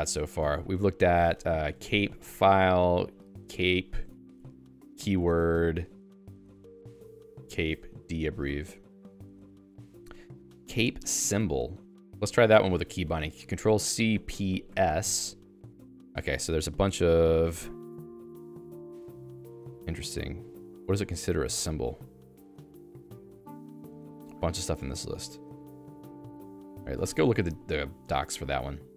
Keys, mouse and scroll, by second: 1.0-12.8 typing, 10.2 ctrl+s, 16.6-19.8 Down, 20.0 Down, 20.1 Page_Down, 20.4 Page_Down, 20.6 Page_Down, 20.9 Page_Down, 21.1 Page_Down, 21.4 Page_Down, 21.6 Page_Down, 21.8-25.1 Page_Down, 25.4 Page_Down, 25.6 Page_Down, 25.8 Page_Down, 26.0 Page_Down, 26.2 Page_Down, 26.3 Page_Down, 26.6 ctrl+g, 27.0 Escape, 27.3-28.3 j, 28.3-28.9 l.